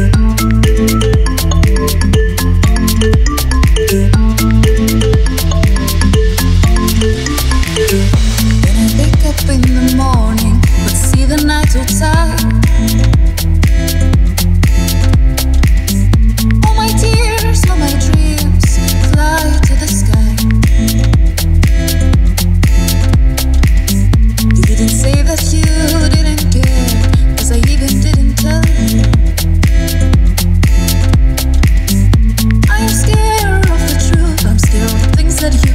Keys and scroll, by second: 1.1-2.7 typing, 1.2 Return, 3.7 alt+Down, 4.0 alt+Up, 6.5 super+s, 12.1 typing, 12.4 Return, 18.1 Up, 18.5 Down, 19.1 Up, 28.4-29.6 typing, 31.2 super+s, 32.3 5, 32.5 Return.